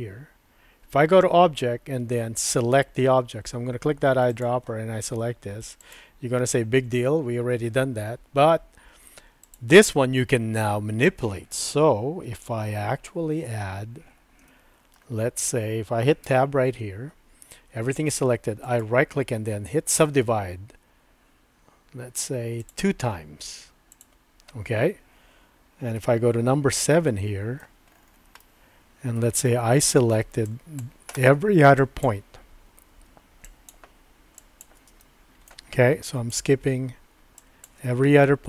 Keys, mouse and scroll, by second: 12.4 middle click, 14.4 shift+middle click, 16.2 Tab, 18.6-20.0 right drag, 22.6 click, 24.0 click, 26.0 KP_7, 27.1 shift+middle click, 28.4 shift+middle click, 30.5 click, 31.7 shift+click, 33.4 shift+click, 34.5 shift+click, 35.0 shift+middle click, 36.2 shift+click, 37.4 shift+click.